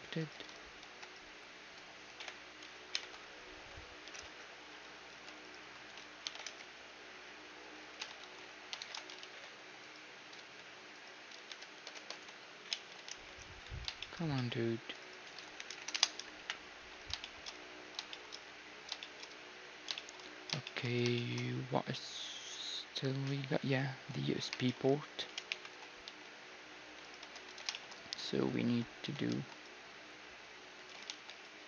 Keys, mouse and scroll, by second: 0.9 alt+d, 2.2 ., 4.1 x, 5.1 g, 6.5 x, 9.3 x, 9.8-11.6 right drag, 10.4 g, 13.1 x, 14.2-16.2 middle drag, 14.8 g, 15.3 r, 16.4 KP_1, 16.9-23.2 middle drag, 23.8-24.5 scroll up 1, 24.5 scroll down 1, 24.7-30.4 middle drag, 25.5 ctrl+KP_3, 26.1-29.0 typing, 27.1-29.0 right drag, 27.3 Tab, 29.3 ctrl+r, 31.1 ctrl+r.